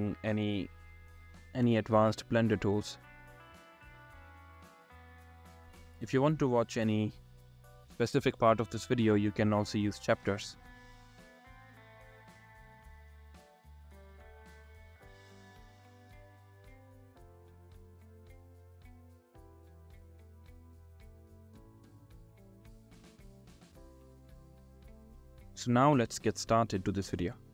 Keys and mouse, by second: 5.0 click, 5.9-7.2 drag, 8.2-9.6 drag, 12.8 click, 13.6 click, 17.8-18.7 drag, 20.3-20.8 drag, 22.1-23.5 drag, 24.9 click.